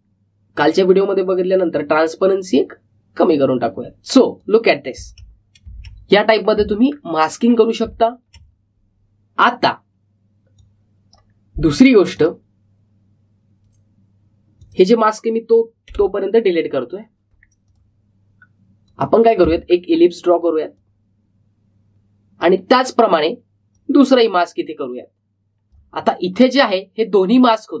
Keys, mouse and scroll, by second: 3.4 click, 5.9 space, 7.8-8.1 alt+scroll down 1, 8.2 alt+scroll up 1, 8.8 space, 8.9 click, 11.5-15.2 drag, 15.6 click, 18.6 click, 20.6 alt+scroll down 1, 21.7-27.1 drag, 27.1-27.5 alt+scroll up 1.